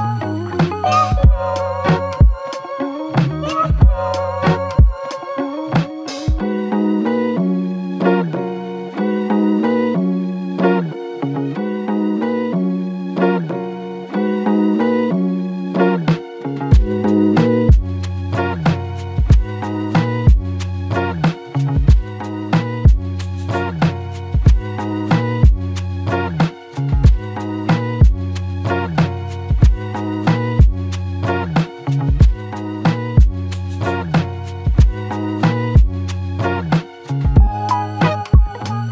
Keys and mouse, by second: 3.3 alt+click, 8.5-9.8 typing, 13.2 double click, 14.5 alt+click, 24.5 alt+click, 26.3 double click, 30.4 ctrl+click, 31.1 shift+click, 35.5 alt+click, 37.8 shift+click.